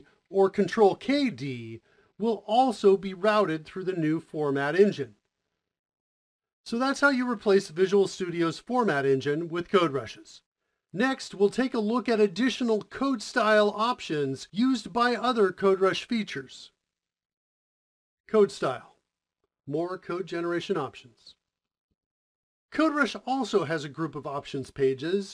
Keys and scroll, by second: 6.2 typing.